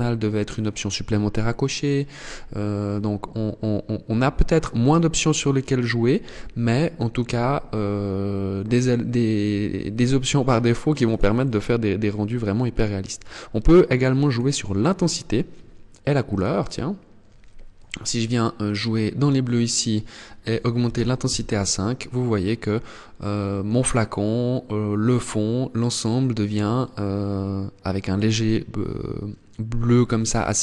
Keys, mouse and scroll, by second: 13.7 click, 16.1 click, 19.1 click.